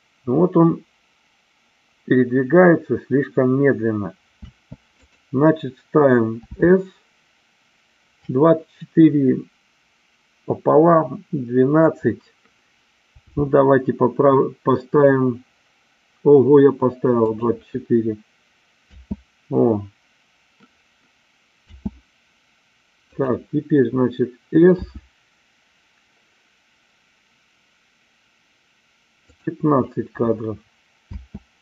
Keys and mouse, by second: 4.4 space, 4.9 click, 6.4 s, 17.3 click, 18.8 space, 23.0 click, 24.7 s, 29.3 click, 31.0 space.